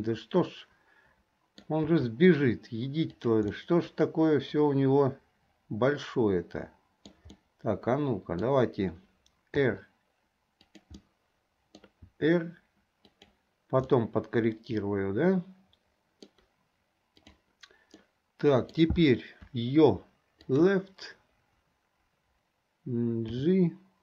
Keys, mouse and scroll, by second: 2.7 g, 3.7-7.3 middle drag, 7.5-8.7 middle drag, 9.7 r, 11.2 middle click, 12.9 r, 14.0-16.4 middle drag, 18.2-18.9 middle drag, 23.9 g.